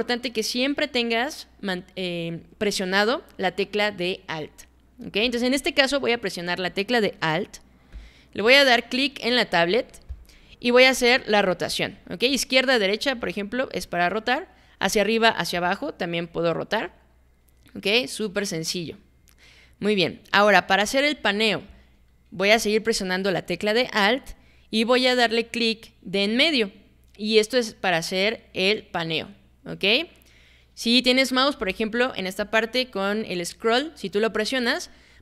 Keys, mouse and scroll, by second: 10.1-21.2 alt+drag, 26.4-31.4 alt+middle drag.